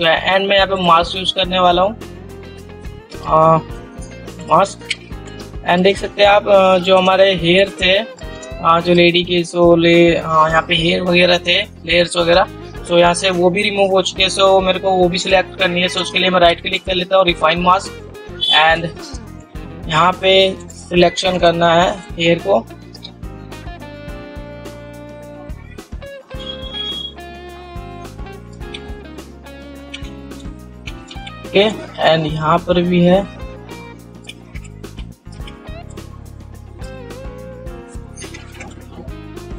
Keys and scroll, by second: 3.3 ctrl++, 6.9 ctrl++.